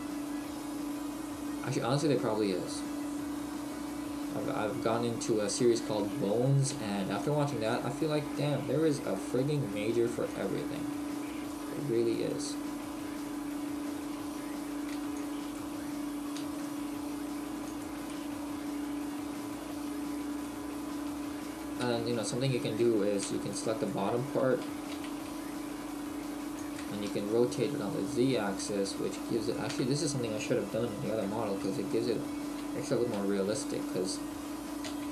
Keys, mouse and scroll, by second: 4.7 middle click, 5.0 middle click, 5.9 middle click, 5.9 a, 6.7 b, 7.9 click, 10.3 click, 12.3 middle click, 17.8 click, 18.1 middle click, 20.5 middle click, 21.1 Tab, 23.2 a, 23.2 b, 26.7 click, 27.1 Tab, 27.3 middle click, 28.8 middle click, 29.5 right click, 29.7 Tab.